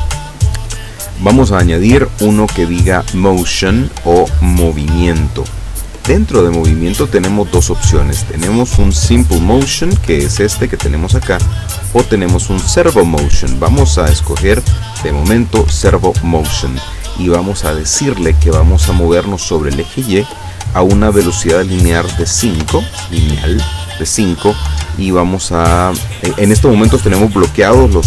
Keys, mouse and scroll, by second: 3.5 click, 6.6 scroll down 1, 7.3 scroll up 1, 8.6 click, 9.6 click, 11.9 click, 15.4 click, 19.5 click, 22.3 KP_5, 22.6 KP_Enter.